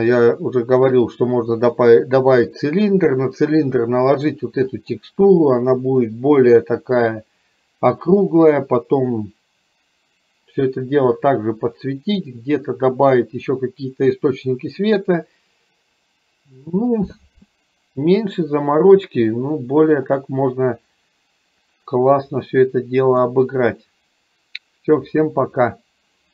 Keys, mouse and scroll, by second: 4.8 click, 20.1 click, 22.4-23.3 middle drag.